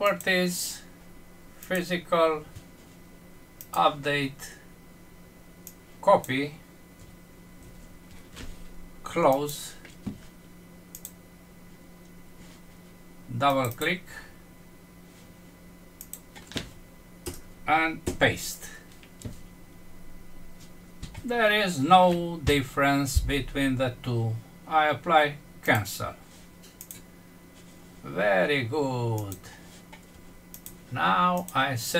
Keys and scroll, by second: 7.5 ctrl+c, 17.2 Return, 18.1 ctrl+v.